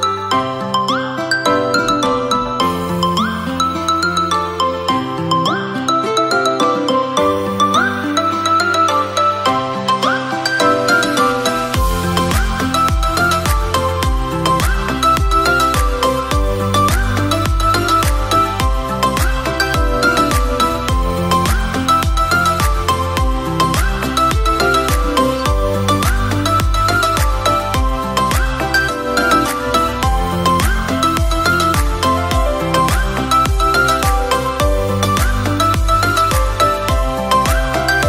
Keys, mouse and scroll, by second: 0.4 z, 1.5 click, 2.7 drag, 3.9 x, 5.8 alt+shift+click, 6.8 z, 7.3-8.5 middle drag, 8.5 e, 10.1 e, 13.8 e, 14.6 click, 16.6 middle click, 17.4 e, 18.1 click, 20.0 e, 21.8 scroll up 1, 21.9-22.3 scroll down 2, 22.3-23.3 middle drag, 24.6-25.9 drag, 26.0 click, 26.8-27.7 middle drag, 27.7 Tab, 28.1-29.6 right drag, 29.6-31.3 drag, 31.3 scroll down 3, 31.9 drag, 33.1 drag, 34.4 s, 35.8 KP_3, 37.3 r.